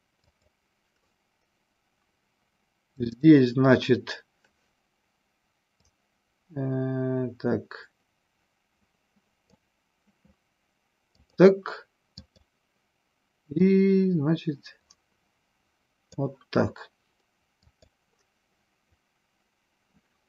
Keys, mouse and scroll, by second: 0.3 click, 3.3 click, 5.9-9.8 drag, 11.4 click, 13.9-16.4 drag, 17.8 click.